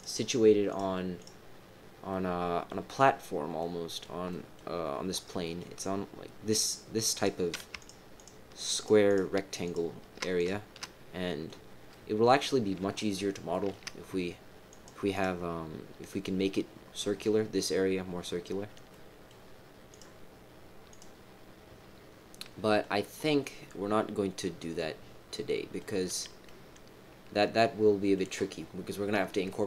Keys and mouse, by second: 2.1 middle click, 3.6 middle click, 4.2 middle click, 5.3 middle click, 7.1 click, 8.1 shift+click, 8.7 shift+click, 9.0 shift+click, 9.6 shift+click, 10.8 middle click, 11.9 middle click, 13.5 shift+middle click, 14.7 click, 15.1 click, 18.9 middle click, 22.3 middle click, 23.2-25.7 middle drag, 26.4-28.1 middle drag, 29.1 middle click.